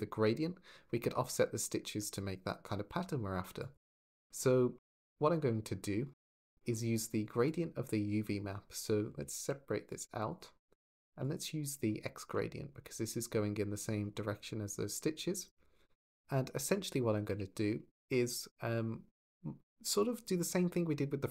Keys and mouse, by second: 1.9 click, 2.7 g, 3.4 click, 17.1 t, 17.6 shift+click.